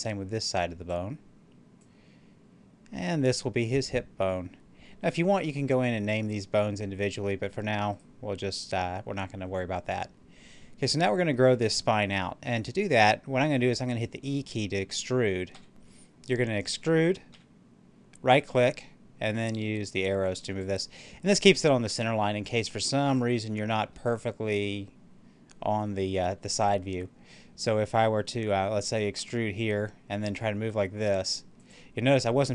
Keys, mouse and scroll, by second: 0.0-5.9 drag, 7.8 right click, 15.4 e, 17.1 e, 18.3 right click, 19.3-23.7 drag, 23.7-27.0 middle drag, 29.0 e, 31.4 click.